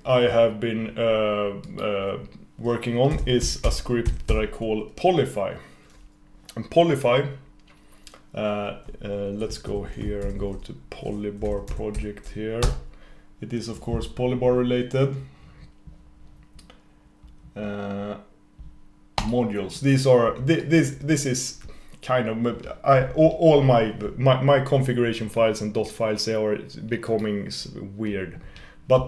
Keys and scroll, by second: 9.7 super+s.